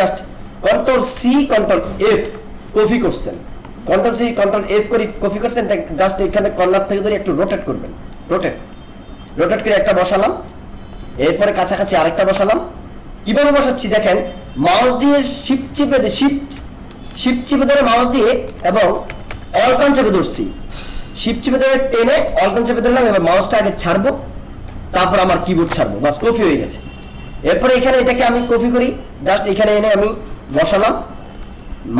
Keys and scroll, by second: 1.1 ctrl+c, 2.1 ctrl+f.